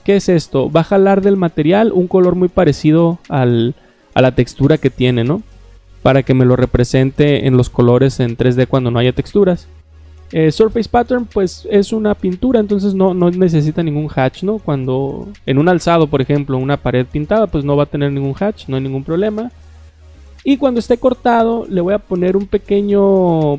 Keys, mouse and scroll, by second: 0.6 click, 4.9 click, 20.8 scroll down 1, 23.1 click.